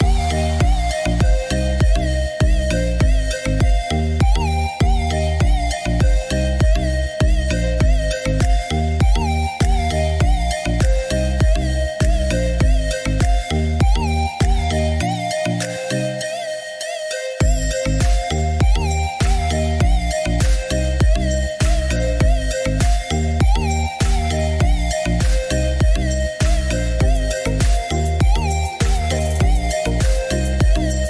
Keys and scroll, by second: 0.7 Escape, 6.7-7.5 typing, 8.6 Escape, 19.2 Escape, 28.8-29.7 typing, 29.7 Return.